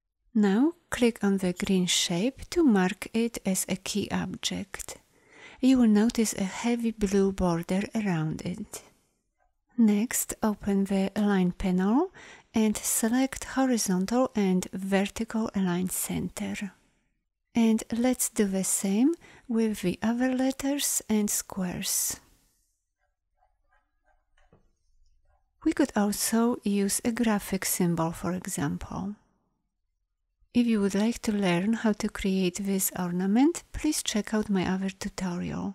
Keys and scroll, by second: 33.7 a, 33.8 Delete, 34.8 Delete, 35.6 ctrl+h.